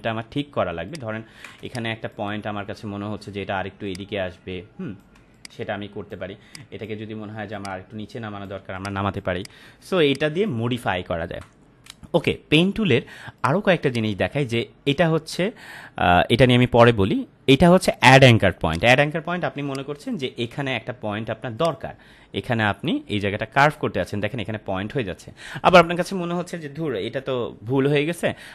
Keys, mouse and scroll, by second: 0.5 space, 1.1-1.5 ctrl+click, 1.6-2.3 space, 2.1 space, 3.9-5.1 click, 5.1 space, 5.3-6.2 click, 5.6 space, 6.5 click, 8.5 space, 8.7 click, 8.9-9.3 space, 9.4 click, 9.5-10.0 space, 10.1 click, 10.2-10.7 space, 13.4 click, 13.8 right click, 18.7 click, 19.5 space, 19.7-20.3 click, 20.1 space, 21.6 click.